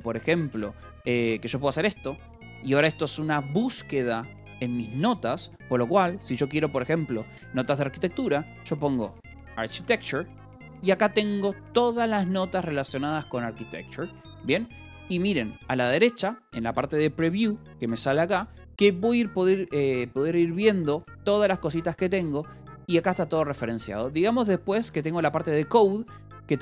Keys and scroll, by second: 0.3 space, 0.4 o, 1.0 s, 8.5-10.8 typing, 21.6 ctrl+p, 22.6 ctrl+n, 23.7-25.6 typing.